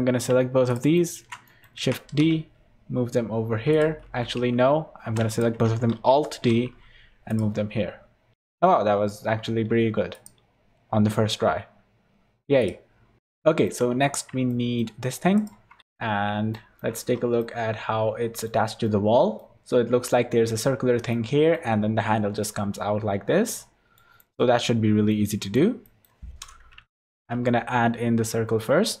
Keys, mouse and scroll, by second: 0.7 shift+click, 0.9 shift+middle click, 1.4 middle click, 1.8 shift+d, 4.3 ctrl+z, 4.7 ctrl+z, 5.3 shift+click, 5.9 alt+d, 7.7-8.4 scroll up 10, 8.3 shift+middle click, 10.1 click, 11.7-12.2 scroll down 9, 12.6 click, 12.9 scroll down 4, 13.2 shift+middle click, 13.2 scroll up 6, 13.4 shift+middle click, 13.9-14.5 scroll up 10, 14.5 shift+middle click, 15.4 shift+right click, 15.8 shift+middle click, 15.8 scroll down 1, 16.1-16.5 scroll up 5, 16.5 shift+middle click, 17.1 scroll down 3, 17.4 middle click, 18.8 middle click, 21.1 middle click, 21.5-22.5 scroll down 2, 23.5 middle click, 24.2 middle click, 24.5-25.1 scroll up 4, 25.1 middle click, 25.8 middle click, 26.9 shift+a.